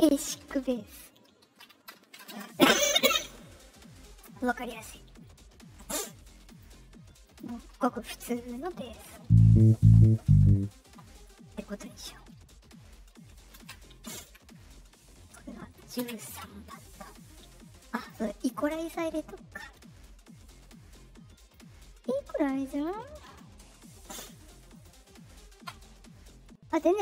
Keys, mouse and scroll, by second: 0.5 BackSpace, 2.2 space, 5.1 middle click, 5.1 scroll down 2, 6.4 click, 7.2 click, 7.7 Return, 12.8 middle click, 12.8 scroll down 2, 15.5 middle click, 15.9 ctrl+v, 17.9 click, 20.6 middle click, 21.3 click, 22.7 click, 23.1 Return, 23.3 Return, 24.7 click, 26.6 click.